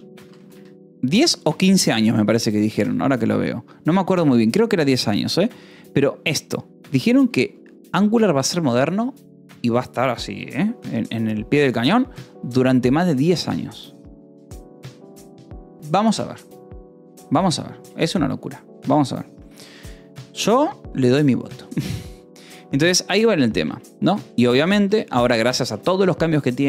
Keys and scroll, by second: 0.0-0.8 typing, 1.6 ctrl+s, 7.9 j, 11.7 o, 18.3 Return, 24.0 BackSpace, 24.5 -, 24.8 space, 25.8 Escape.